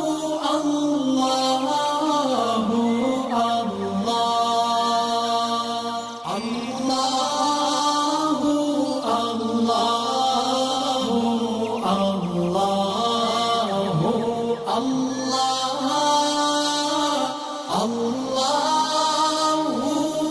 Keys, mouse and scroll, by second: 1.3 click, 3.4 alt+scroll down 1, 3.8-4.4 alt+click, 4.5 right click, 5.2 click, 8.1 alt+scroll up 1, 8.6 space, 8.7-10.8 drag, 11.6 alt+scroll down 1, 12.2 space, 12.2 click, 13.3-14.1 alt+scroll up 1, 14.4 alt+scroll down 1, 15.1 space, 15.2 click, 16.1 alt+scroll up 1, 16.6 alt+scroll up 1, 16.9 alt+scroll down 1, 17.6 click, 18.8 alt+scroll down 1, 19.0 space, 19.1 click, 20.0 space, 20.1 click.